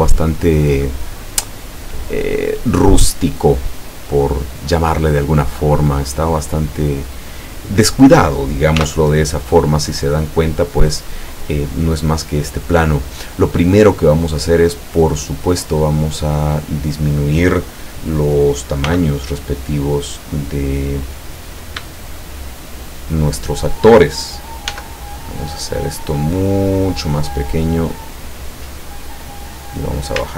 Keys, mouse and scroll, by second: 6.4-7.9 drag, 8.9 t, 9.8-10.5 middle drag, 10.6 scroll down 2, 11.0-13.2 middle drag, 13.3-13.6 scroll up 2, 13.8-15.3 middle drag, 15.9 right click, 18.9 b, 19.3-20.6 drag, 22.6 shift+right click, 24.7 s, 28.2 click.